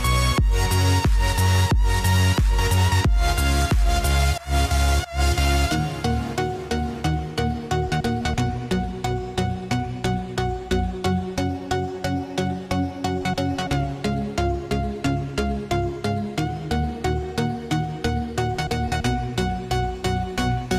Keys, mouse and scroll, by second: 2.4-5.1 drag, 5.1-15.7 drag, 15.9-20.7 drag.